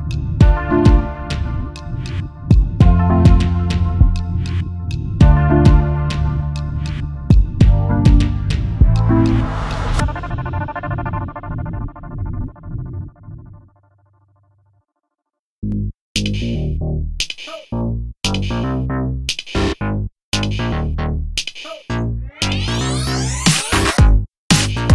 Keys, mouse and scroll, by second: 0.2-3.0 ctrl+drag, 4.2-6.2 shift+drag, 7.2-8.4 drag, 9.1-10.4 ctrl+drag, 11.1 click, 14.8-15.9 shift+drag, 16.6 ctrl+shift+click, 21.7-22.1 ctrl+scroll up 1, 24.7-24.9 shift+scroll up 1.